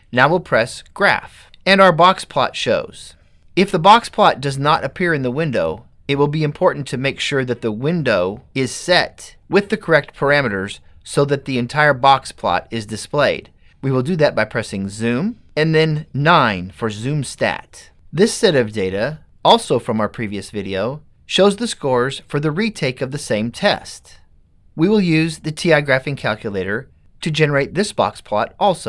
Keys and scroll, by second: 13.7 9.